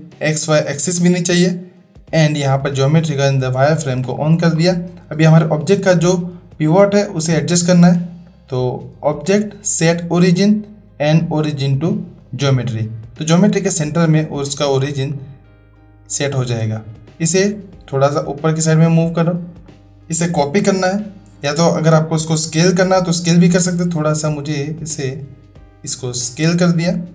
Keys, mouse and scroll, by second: 4.1 shift+click, 8.4-12.3 drag, 13.5-14.1 middle drag, 16.2 shift+middle drag, 17.2-19.2 drag, 19.6-19.9 middle drag, 23.7 s, 26.1-27.1 middle drag.